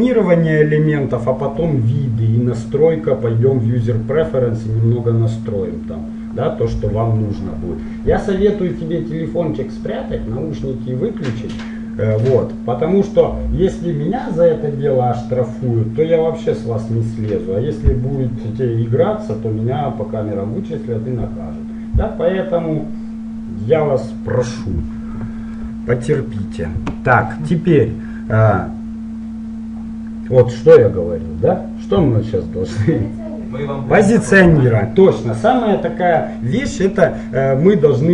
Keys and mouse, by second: 27.3 middle click, 28.5-30.9 middle drag.